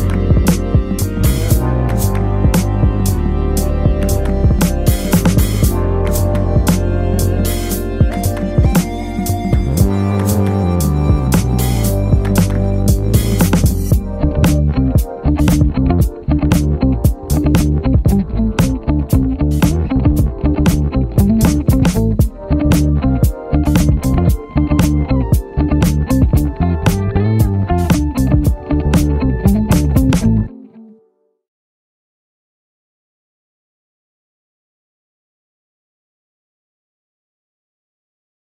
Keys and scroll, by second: 13.3 b, 18.4 b, 33.3 alt+super+z, 36.0 alt+super+z, 37.5 alt+super+z.